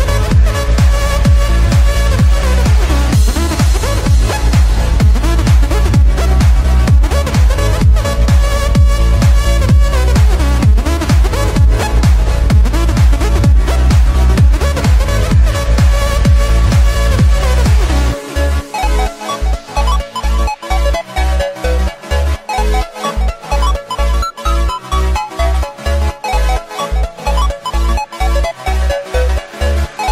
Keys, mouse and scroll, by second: 5.9 ctrl+z, 7.9 click, 8.8-9.5 scroll up 2, 9.7-10.2 scroll up 4, 10.2 z, 12.4 click, 13.4 click, 14.0 Tab, 15.2 Tab, 16.1 KP_7, 16.9-18.5 scroll down 8, 18.5-19.5 drag, 19.5-20.1 scroll up 5, 20.1-20.5 shift+middle drag, 20.5-21.5 shift+scroll up 2, 21.5 s, 22.7 z, 23.9-24.2 scroll up 1, 24.2-26.1 middle drag, 26.1-26.6 scroll up 2, 26.7-27.4 scroll down 1, 27.4 s, 29.4-30.1 drag.